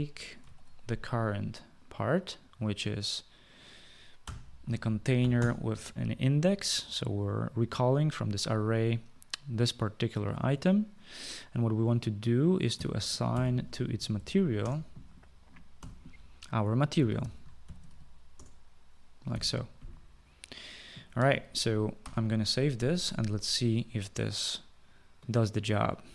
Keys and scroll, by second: 0.6 ctrl+v, 4.3-6.0 typing, 12.6-19.4 typing, 22.1 ctrl+s.